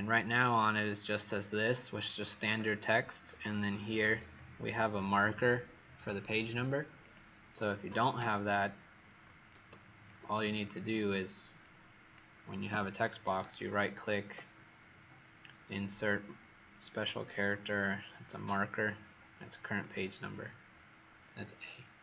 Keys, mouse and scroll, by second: 3.8-6.9 alt+scroll up 5, 6.9 click, 10.8 click, 11.6 click, 12.6 Delete, 13.3 right click, 19.7 click.